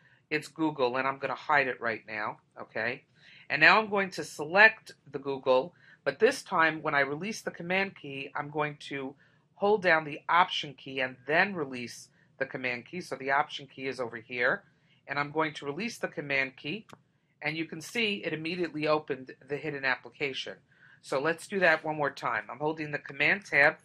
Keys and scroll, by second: 23.5 super+Tab.